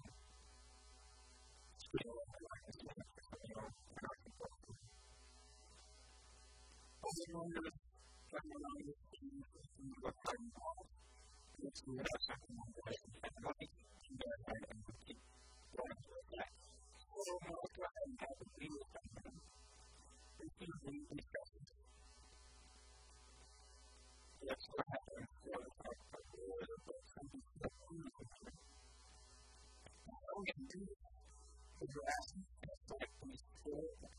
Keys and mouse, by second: 0.0 a, 0.3 b, 1.7 s, 3.3 right click, 3.9-5.3 middle drag, 4.9 s, 5.3 click, 5.9-7.2 right drag, 7.2 middle click, 7.2 s, 7.6 click, 11.5 KP_1, 16.9-18.5 drag, 17.7 Tab, 18.7 Tab, 20.5 x, 22.7 click, 23.5 click, 23.8 click, 24.3-26.5 right drag, 25.2 s, 27.0-28.9 drag, 28.2 s, 29.3-30.9 drag, 29.3 a, 32.5-34.1 right drag.